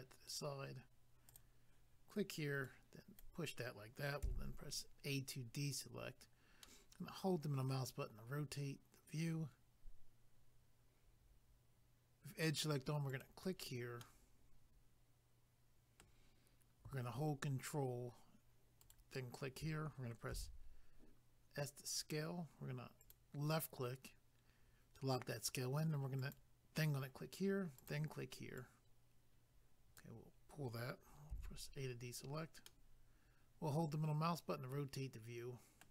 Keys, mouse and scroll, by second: 2.7 click, 4.3 a, 6.6 middle click, 13.1 click, 13.2 click, 14.0 middle click, 18.8 ctrl+right click, 18.9 ctrl+right click, 20.3 s, 23.0 click, 23.1 click, 26.2 click, 26.3 click, 27.7 click, 27.9 click, 28.6 click, 32.0 scroll down 1, 32.6 middle click.